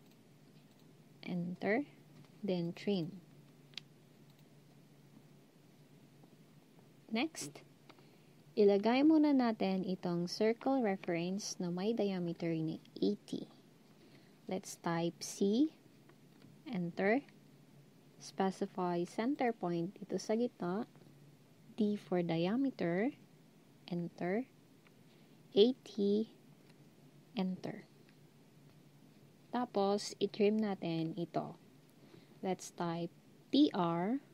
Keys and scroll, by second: 15.4 c, 21.9 d, 25.4-26.1 typing, 33.3-34.1 typing.